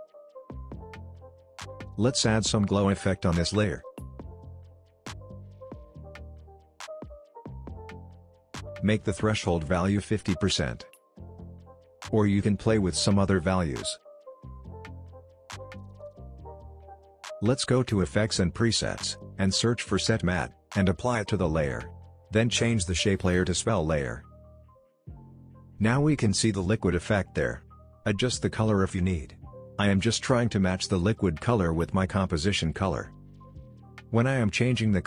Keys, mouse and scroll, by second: 1.1 click, 3.0-4.3 typing, 5.3 click, 12.4 Return, 15.5 click, 18.5-20.4 typing, 21.7 click, 23.0-23.3 scroll down 1, 23.7 click, 27.5 space, 29.1-29.7 drag, 33.1 scroll down 1, 33.5 alt+scroll up 1, 33.7 space, 33.8 drag.